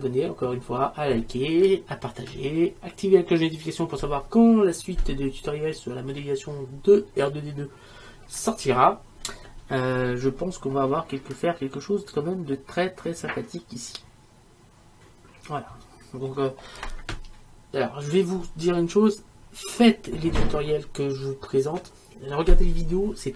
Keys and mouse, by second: 15.9 middle click, 16.2 middle click.